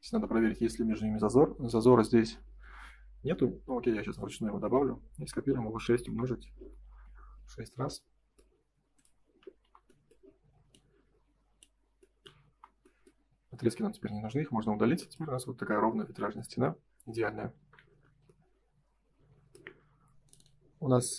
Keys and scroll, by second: 2.1 F4, 6.0 Return, 6.8 space, 9.5 Delete, 12.5 Delete, 13.4 ctrl+s, 17.5 ctrl+s.